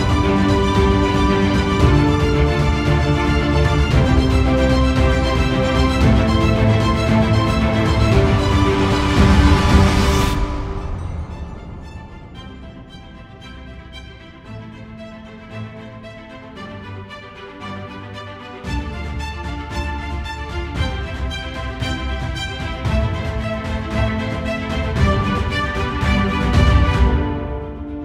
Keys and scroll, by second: 12.9 ctrl+0.